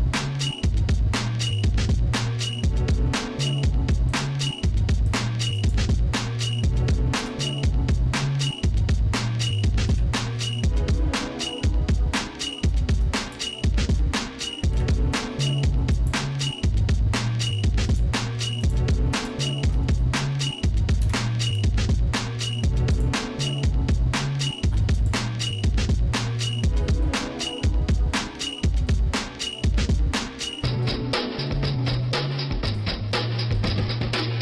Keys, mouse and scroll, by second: 0.4-1.1 scroll up 3, 4.3 click, 5.1 alt+shift+click, 5.7 alt+shift+click, 7.2 ctrl+KP_Add, 9.9 y, 11.0-12.2 shift+middle drag, 12.7 shift+middle click, 13.2 click, 14.7 Delete, 16.5 shift+middle click, 17.9 click, 18.6 alt+shift+click, 21.0 ctrl+KP_Add, 22.9 click, 25.1-34.4 drag.